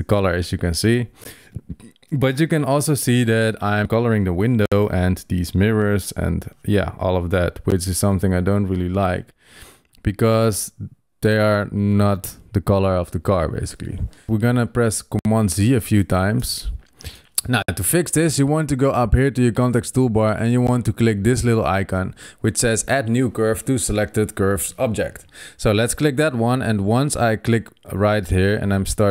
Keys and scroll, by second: 15.2 super+z.